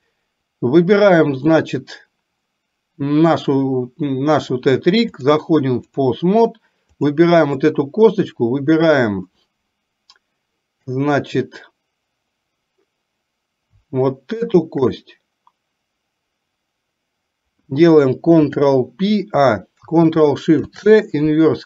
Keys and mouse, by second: 0.1 click, 5.3 click, 6.9 click, 14.4 shift+click, 18.4 ctrl+p, 20.8 ctrl+shift+c.